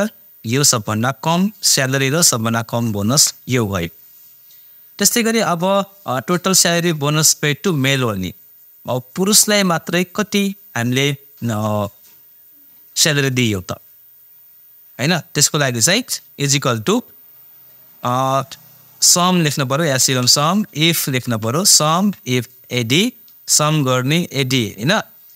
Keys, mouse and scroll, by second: 0.9 click, 16.4 =, 19.4-21.9 typing.